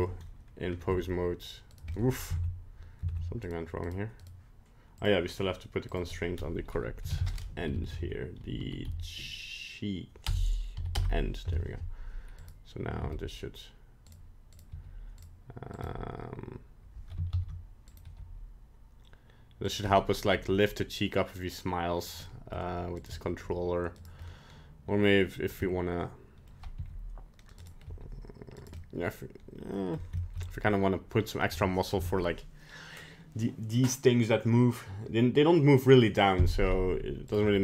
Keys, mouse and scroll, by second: 0.0 Tab, 0.8 g, 1.9 middle click, 2.3 ctrl+Tab, 3.1 ctrl+Tab, 3.4 right click, 3.8 right click, 4.2 right click, 4.9 click, 5.8 click, 7.7 Down, 7.9 Down, 8.5 Up, 12.4 right click, 13.0 g, 14.5 right click, 14.7 g, 15.7 right click, 17.4 ctrl+z, 17.9 right click, 18.0 g, 20.0 middle click, 20.3 g, 22.2 middle click, 23.0 right click, 23.1 g, 24.2 middle click, 25.3-25.6 scroll down 1, 25.6 middle click, 26.4 middle click, 26.7 r, 27.8 g, 28.8 middle click, 29.9 middle click, 30.2 shift+middle click, 30.5 middle click, 31.5 middle click, 37.3 right click, 37.4 g.